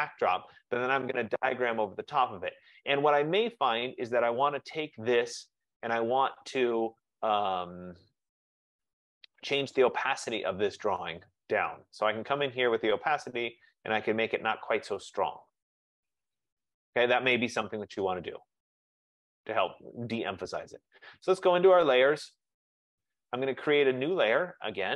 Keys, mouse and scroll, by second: 3.6 click, 6.5 click, 8.1 click, 10.4 click, 12.4 click, 13.5 click, 16.9 click, 19.1 F15, 20.4 click, 21.4 click.